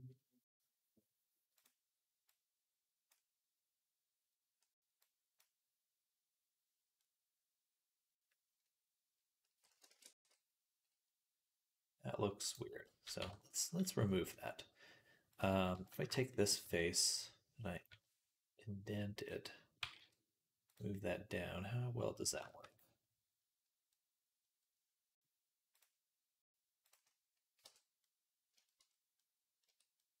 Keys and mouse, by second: 6.9 middle click, 6.9 right click, 9.8 ctrl+a, 12.7 middle click, 12.7 right click, 13.0 Tab, 15.2 right click, 15.9 shift+right click, 16.3 middle click, 16.5 f, 17.8-19.2 drag, 17.8 i, 19.2 middle click, 19.3 click, 19.4 middle click, 19.6-22.2 drag, 19.7 g, 22.2-28.4 shift+right drag, 25.6-26.7 drag, 27.4 x, 28.6-30.2 right drag.